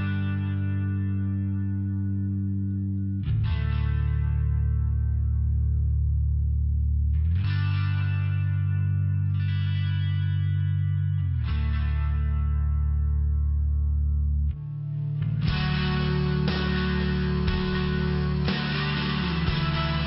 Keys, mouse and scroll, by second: 2.0 click, 2.2 click, 2.5 click, 2.8 click, 7.7 click, 8.6 click, 11.8 click, 17.7 click.